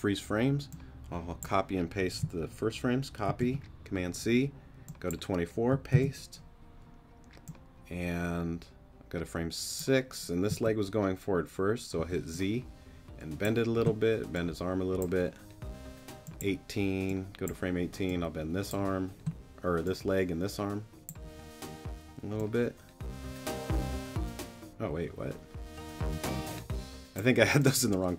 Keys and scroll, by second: 3.3 super+c, 5.9 super+v, 10.5 z, 12.0 z.